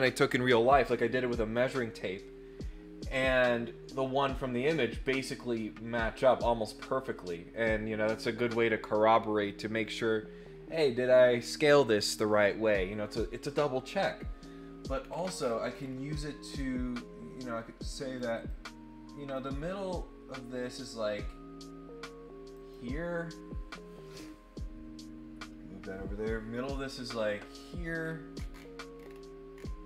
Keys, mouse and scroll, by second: 15.0 middle click, 15.3-16.1 scroll up 6, 16.5-18.1 drag, 18.4 click, 22.5 click, 28.0-28.4 scroll up 2, 28.5-29.1 scroll down 2, 29.5-29.8 scroll down 5.